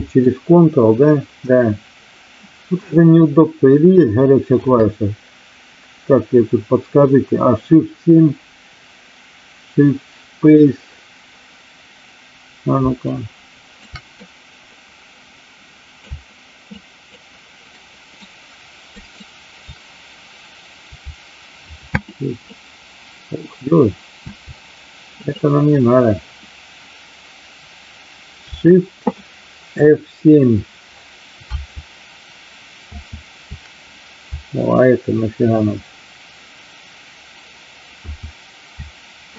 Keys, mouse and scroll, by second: 0.2-4.6 ctrl+drag, 13.0 shift+click, 14.2-16.1 drag, 16.6 shift+click, 17.8 shift+right click, 19.0 shift+right click, 21.8 shift+space, 33.0 shift+F7, 37.8 shift+F7.